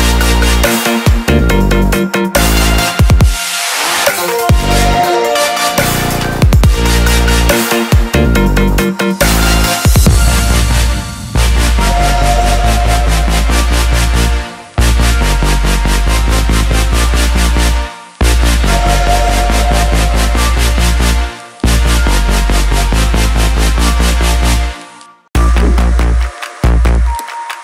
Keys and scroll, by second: 8.3 ctrl+t.